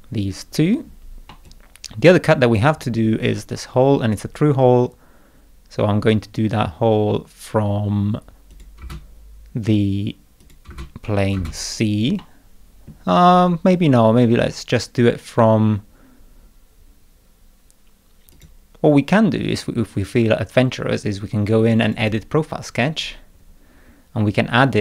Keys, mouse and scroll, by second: 1.3-2.5 middle drag, 1.4-2.5 drag, 8.5 click, 8.8 space, 10.4 click, 10.6 space, 11.2 click, 11.3 space, 12.2 middle click, 18.3 click, 21.8 click, 22.0 click, 23.2-23.6 scroll up 1.